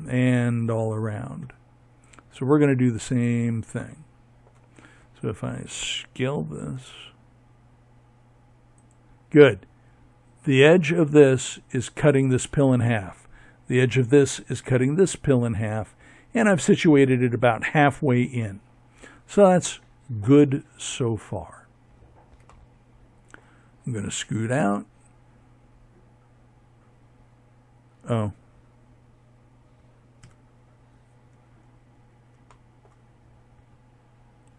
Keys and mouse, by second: 4.8 s, 18.8-21.7 middle drag, 28.1 ctrl+KP_3, 32.0 middle click.